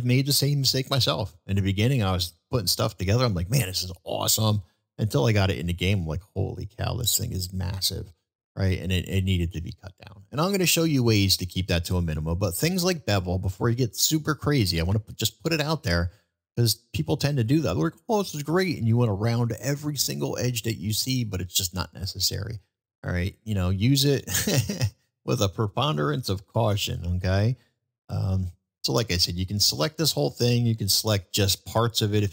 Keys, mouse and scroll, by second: 11.8 middle drag, 13.5-14.2 middle drag, 23.4 middle click, 24.9 middle click, 26.6 shift+middle click, 27.2 middle click, 28.1 middle drag, 29.6 drag, 30.4-31.5 middle drag.